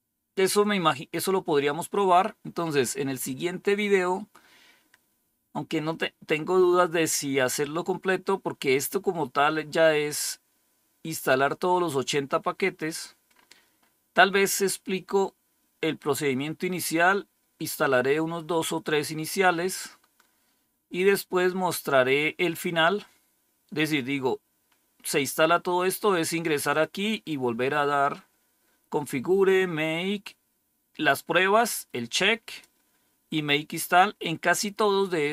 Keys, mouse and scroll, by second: 3.1 click, 3.7 click, 9.3-10.1 scroll down 1, 10.1-10.9 scroll up 1, 11.1-11.9 scroll down 1, 11.9-12.6 scroll down 1, 12.6-13.2 scroll down 1, 13.2-15.1 scroll up 1, 20.6-21.4 scroll down 1, 21.4-23.6 scroll down 1, 23.6-25.0 scroll up 1, 26.6 click, 27.3 click, 29.7-31.4 scroll down 2, 31.4-35.3 drag.